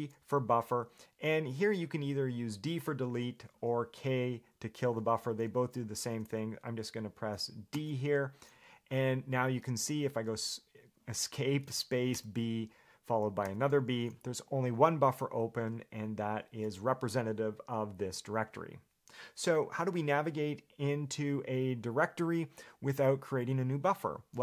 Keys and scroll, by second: 10.0 Escape, 16.4 Escape.